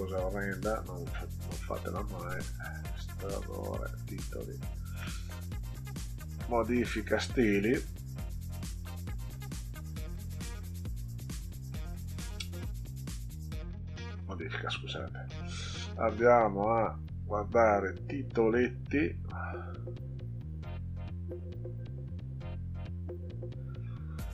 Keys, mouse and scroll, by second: 0.1 click, 1.1 click, 2.3 click, 3.8 click, 5.9 click, 7.1 click, 8.7 click, 10.2 click, 14.2 click, 16.3 click.